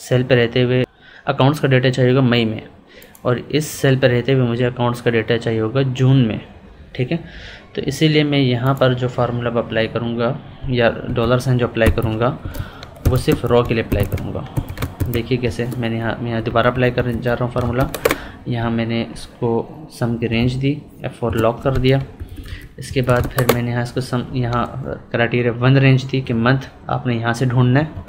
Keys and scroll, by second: 11.0 Escape, 16.4 Left, 17.1 Up, 20.3 F4, 22.1 ctrl+Left, 22.8 Up, 27.7 F4.